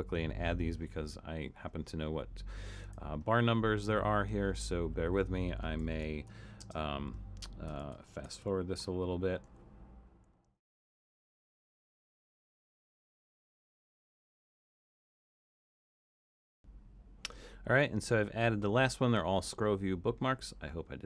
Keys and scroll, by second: 5.5-17.0 typing, 10.9 super+b, 14.6 super+b.